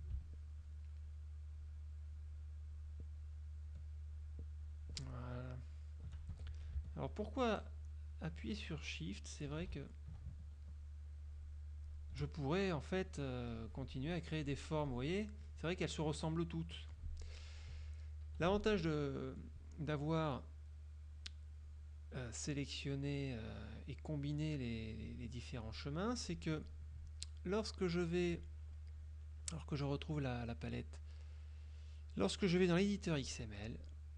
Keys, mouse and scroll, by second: 0.5 shift+click, 1.1 shift+click, 1.7 shift+click, 2.2 shift+click, 2.8 shift+click, 3.3 shift+click, 3.8 shift+click, 4.2 shift+click, 4.8 shift+click, 5.3 shift+click, 6.4 shift+Escape, 7.0 shift+click, 7.6 shift+click, 8.2 shift+click, 8.9 shift+click, 10.8 shift+click, 11.4 shift+click, 11.9 shift+click, 13.6 click, 14.0 click, 14.5 click, 15.0 click, 18.4 F2, 18.7 click, 20.5 click, 21.8 click, 23.1-24.3 drag, 25.6 click, 26.4 click, 28.4-33.4 drag.